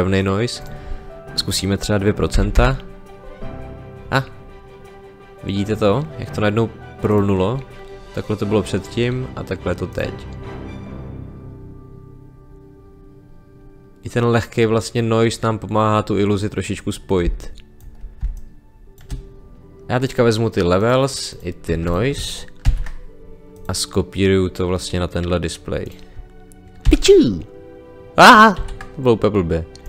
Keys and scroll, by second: 2.3 2, 2.5 Return, 17.2 space, 22.6 ctrl+c, 26.8 ctrl+v, 28.5 ctrl+z.